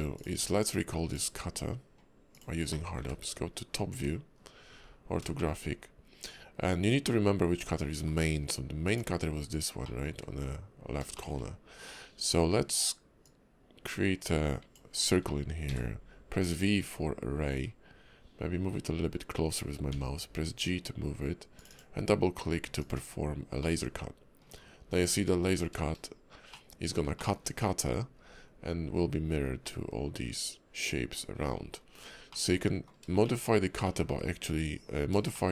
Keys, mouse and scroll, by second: 0.1 click, 0.4 q, 2.7 middle click, 3.0-4.8 typing, 5.3 shift+middle click, 5.6 scroll up 2, 7.0 middle click, 9.8 middle click, 9.8 click, 10.1 `, 11.1 shift+middle click, 11.4 scroll up 2, 13.2 click, 23.2 click, 23.6 middle click, 24.6 scroll down 3, 25.2 KP_5, 25.9-26.6 shift+scroll down 3, 26.6 middle click, 27.2 shift+middle click, 27.5 scroll up 3, 28.1 scroll up 1, 28.3 scroll down 3, 29.6 middle click, 31.7 scroll up 3, 32.3 middle click, 33.2 shift+middle click, 33.8 middle click, 34.1 `, 34.7 KP_5, 35.3 shift+middle click.